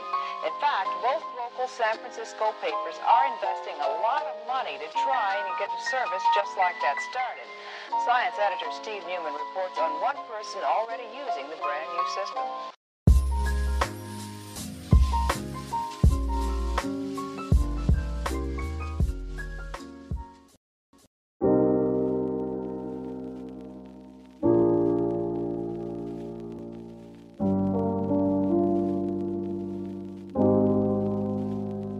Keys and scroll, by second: 8.3 b, 22.3-23.3 typing, 31.8 5, 31.8 5.